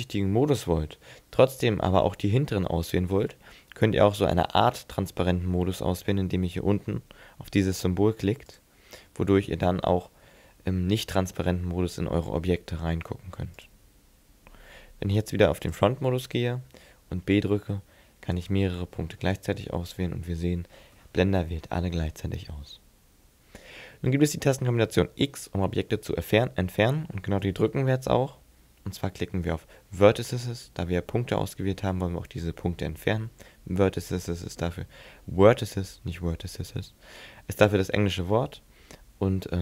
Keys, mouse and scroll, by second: 2.0 z, 8.5 click, 9.5 middle click, 17.0 b, 19.2 middle click, 27.5 x.